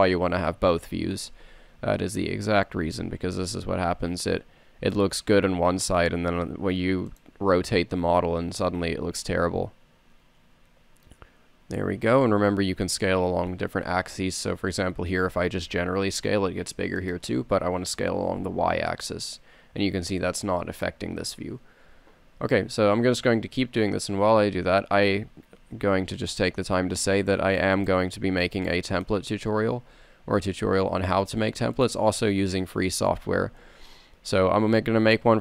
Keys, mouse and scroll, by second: 0.6 Tab, 3.2 s, 8.3 g, 15.8 s, 18.0 s, 25.3 e, 29.0-30.1 middle drag, 30.1 s, 33.6 g.